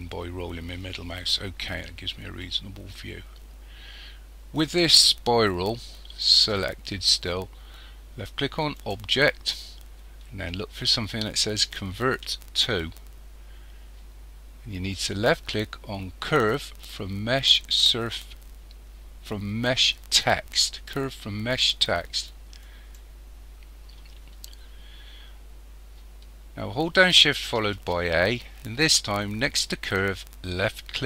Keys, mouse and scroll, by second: 8.8 click, 27.7 shift+a.